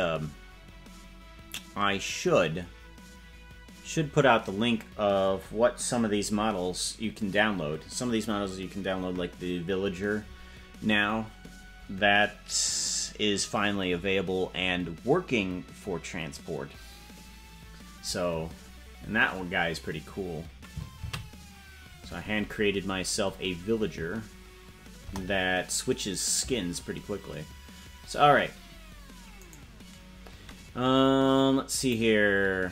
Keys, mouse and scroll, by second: 23.1 ctrl+s, 25.1 KP_0, 29.5 right click, 32.0 click.